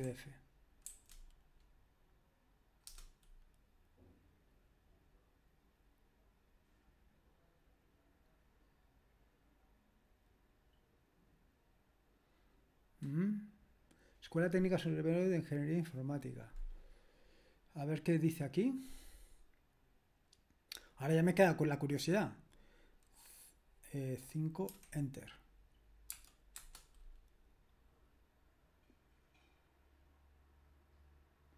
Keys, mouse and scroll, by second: 0.0-0.8 typing, 2.9 Return, 24.7 5, 26.6 Return.